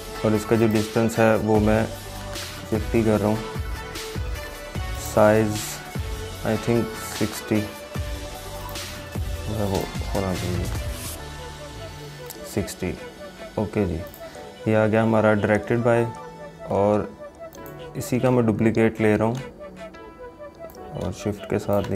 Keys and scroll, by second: 19.3 ctrl+j.